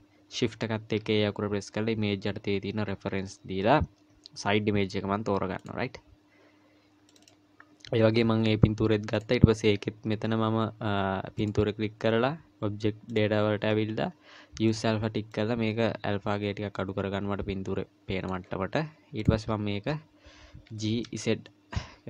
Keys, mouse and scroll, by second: 1.0 shift+a, 8.0-9.2 scroll up 2, 9.2 click, 11.4 click, 19.2 click, 20.7 g.